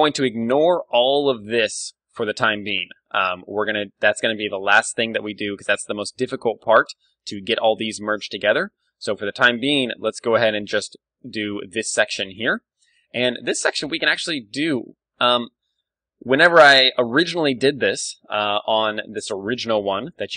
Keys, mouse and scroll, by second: 0.1 d, 0.3-1.9 drag, 1.8 d, 1.9 d, 3.2 d, 3.3-5.1 right drag, 6.6-11.1 middle drag, 9.7 ctrl+w, 12.6 middle click, 14.2 Tab, 15.0-17.6 middle drag, 18.1-20.0 middle drag.